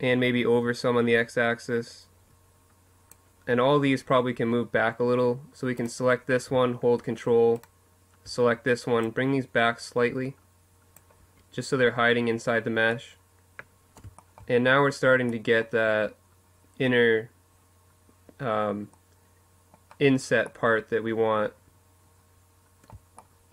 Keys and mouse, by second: 4.5-7.8 drag, 7.8 middle click, 8.0-9.6 drag, 9.9 Tab, 10.4 click, 17.3-19.5 middle drag, 21.1 middle click.